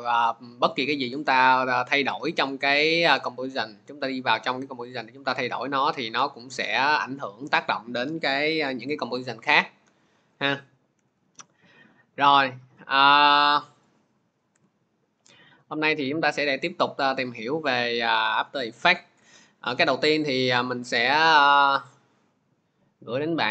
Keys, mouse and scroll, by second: 2.1 click, 5.2 ctrl+z, 7.4 click, 10.2 click, 10.8 Delete, 12.3 click, 13.2 click, 13.8 click, 14.4 Delete, 15.6 click, 18.2 alt+Tab, 19.0 alt+Tab, 21.5 click.